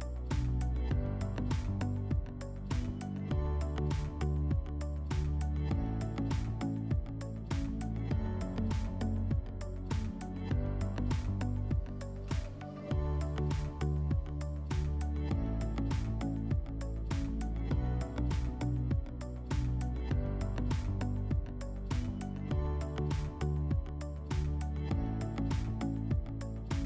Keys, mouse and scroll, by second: 0.1 click, 10.4-12.4 drag, 13.9-15.2 drag, 16.5 click, 17.7 click, 19.5 click, 23.3 click, 24.1 click, 25.3 click.